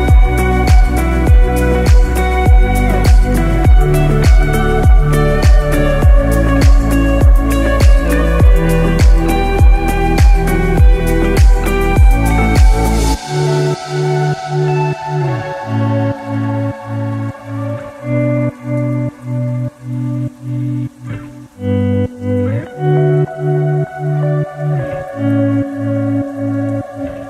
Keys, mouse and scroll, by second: 5.5-5.8 scroll up 3, 6.0 scroll down 2, 6.4 middle click, 7.8 alt+z, 8.3 scroll up 1, 8.8 shift+middle click, 9.2 middle click, 15.9-16.5 scroll down 2, 16.3 shift+middle click, 16.8-17.1 scroll up 4, 17.5 shift+middle click, 18.3 KP_1, 18.9 scroll up 1, 19.3 shift+middle click, 20.6 g.